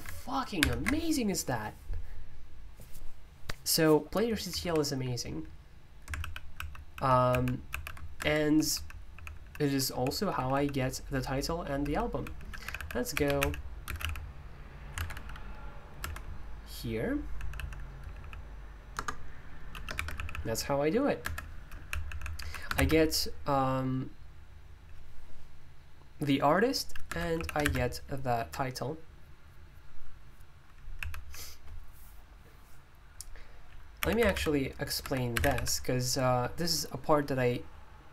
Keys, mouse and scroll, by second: 0.6 alt+super+i, 4.6 super+u, 6.1 super+l, 6.5 super+l, 7.3 super+h, 8.2 Escape, 8.3-16.0 typing, 17.1-23.2 typing, 21.2 Escape, 27.1 Escape, 27.3 j, 27.6 shift+v, 28.4 Escape, 30.9 k, 31.2 k, 34.0-35.8 typing.